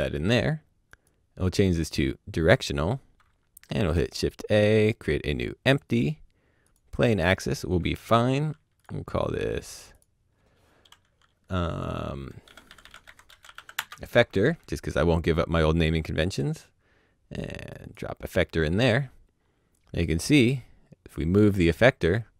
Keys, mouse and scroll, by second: 3.6 click, 3.7 shift+a, 5.8 click, 8.7 click, 12.5-13.5 typing, 13.7 Return, 16.3 Return, 16.3 click, 19.7 click.